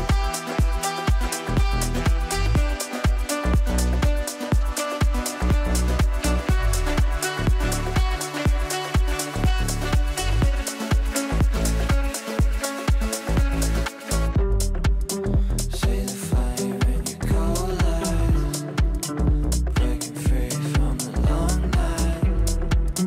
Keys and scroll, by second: 1.5 g, 8.1 space, 9.3 g.